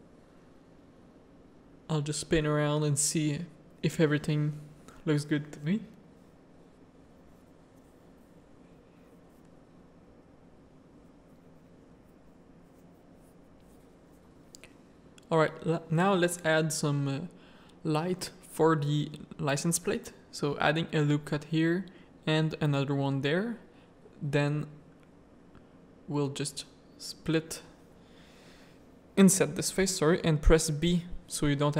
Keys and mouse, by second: 0.6 shift+click, 3.5 ctrl+f, 11.9 middle click, 13.2 middle click, 14.6 middle click, 15.1 z, 15.5 middle click, 16.6 middle click, 17.9 Tab, 18.1 middle click, 19.2 ctrl+r, 21.5 ctrl+r, 22.8 3, 23.4 1, 23.6 ctrl+r, 24.7 3, 25.1 click, 26.1 x, 31.4 x.